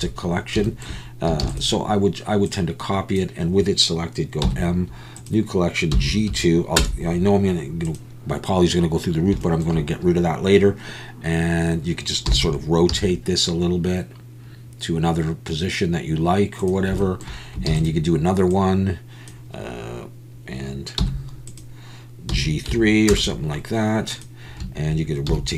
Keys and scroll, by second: 1.9 shift+d, 4.4 m, 12.3 r, 12.9 z, 18.0 shift+d, 21.0 m, 25.3 r.